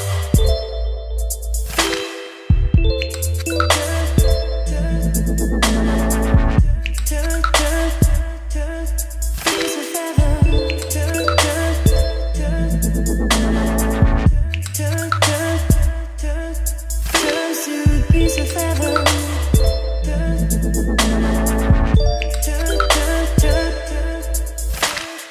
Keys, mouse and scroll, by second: 0.4 Return, 0.4-2.7 typing, 5.8 >, 6.6 j, 8.4 ctrl+space, 16.4 right click, 17.1-18.6 drag, 18.6-21.7 right drag, 21.7-22.7 drag, 22.7-25.3 right drag.